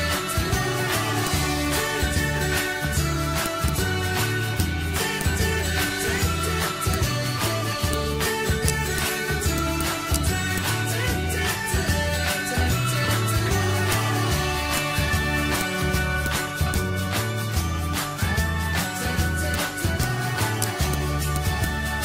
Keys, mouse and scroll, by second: 0.2 Left, 1.2-2.6 drag, 2.6 ctrl+z, 3.4-6.9 drag, 7.1 ctrl+c, 7.9 click, 8.6 shift+right click, 9.0 click, 10.1 shift+right click, 10.5-11.8 drag, 13.2 Insert, 13.9-20.6 drag, 20.6 shift+right click, 20.9 click, 21.8 click.